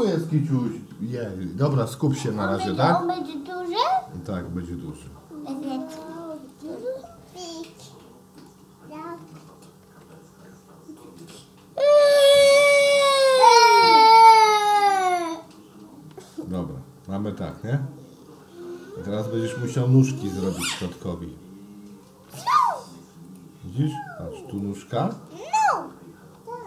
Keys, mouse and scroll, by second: 4.9 ctrl+e, 9.9 ctrl+z, 14.9 ctrl+e, 17.5-19.8 middle drag, 20.6 Tab, 21.2 Tab, 23.3 click, 24.5 click.